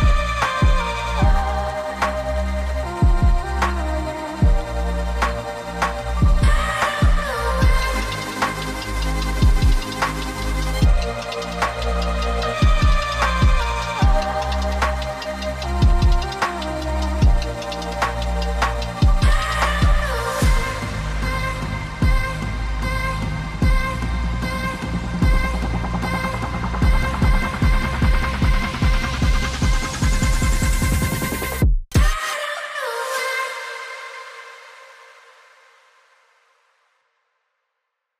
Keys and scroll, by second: 1.8 v, 6.0 ctrl+shift+], 6.2 ctrl+x, 6.8 ctrl+f, 8.1 ctrl+x, 8.5 ctrl+f, 8.7 ctrl+[, 15.5 g, 19.6 v, 21.5 g, 24.4 v, 28.1 g, 30.0 v, 30.8 z, 32.3 v.